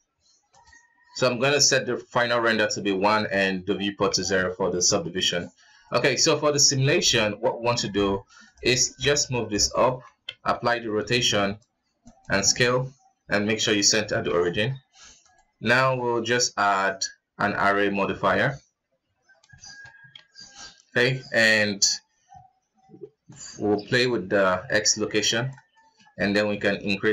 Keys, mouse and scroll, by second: 1.2-3.6 middle drag, 3.6 scroll down 1, 3.8 KP_1, 4.7 shift+middle click, 5.6 right click, 6.6 right click, 6.8 g, 8.4-8.7 scroll down 4, 8.8 g, 10.0 ctrl+a, 12.1 w, 14.2 ctrl+s, 14.9 click, 15.5-17.8 drag, 17.8 scroll down 3, 18.1-18.8 middle drag, 18.8-19.3 scroll up 3, 19.3 shift+middle click, 19.9 ctrl+s, 23.0-25.5 shift+drag, 25.5-27.1 shift+middle drag.